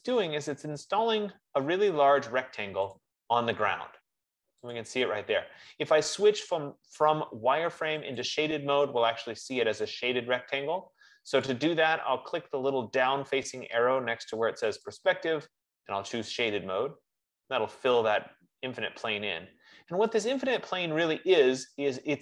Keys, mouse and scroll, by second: 0.1 click, 0.6-2.3 scroll, 3.3-3.8 scroll, 3.8 click, 5.1 click, 8.5 click, 11.9 click, 15.8 click, 16.8 click, 20.7 click.